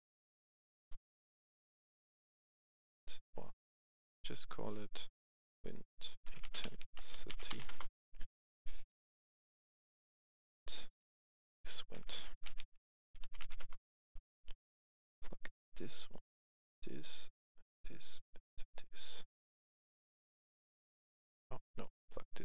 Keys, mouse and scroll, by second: 0.0-0.3 typing, 0.7 Return, 4.0 click, 6.4-7.5 typing, 7.6 Return, 8.6 click, 11.9-13.5 typing, 13.5 Return, 15.2-17.0 drag, 19.0 click, 20.5 right click, 21.7-22.4 drag.